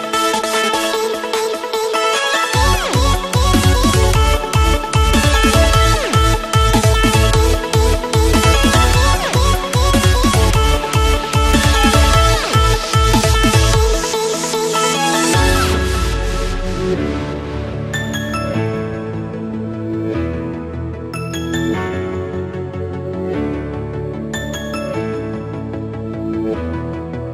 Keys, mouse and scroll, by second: 0.2 click, 0.5 ctrl+a.